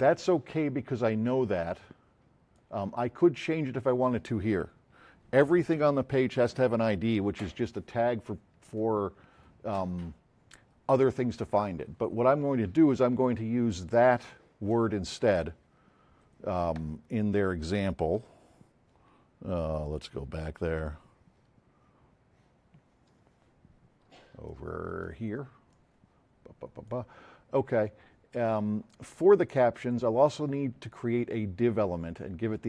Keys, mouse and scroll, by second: 1.2 click, 2.3 click, 19.8 click, 24.4-25.2 drag, 25.7 click, 26.7-28.1 middle drag.